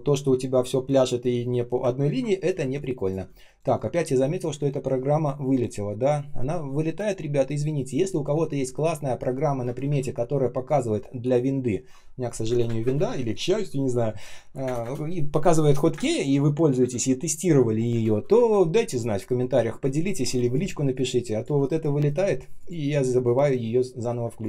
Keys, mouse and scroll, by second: 9.6 space, 9.8 space, 12.4 space, 12.6 space, 12.7 space, 14.5 space, 14.7 space, 15.9 space, 16.7 space, 17.8 space, 20.6 space, 21.1 space, 21.2 space, 24.1 space.